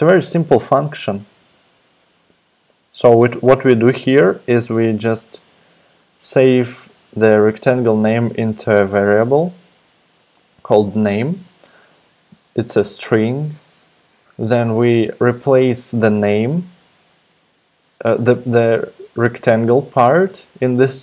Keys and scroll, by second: 1.4 super+Tab.